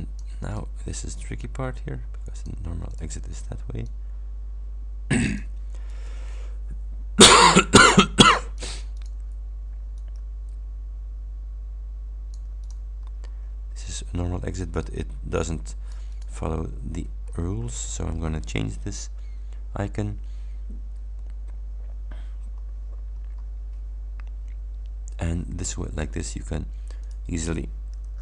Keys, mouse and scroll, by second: 0.6 click, 1.4-2.7 ctrl+drag, 2.9 ctrl+click, 3.9-5.7 drag, 6.0 Delete, 7.4-8.9 drag, 9.0 click, 10.0-13.0 ctrl+drag, 13.1 ctrl+scroll up 2, 13.9-16.5 ctrl+drag, 16.6 ctrl+scroll down 2, 17.3 ctrl+scroll down 2, 22.2 scroll down 2, 22.6-23.4 drag, 27.1 click.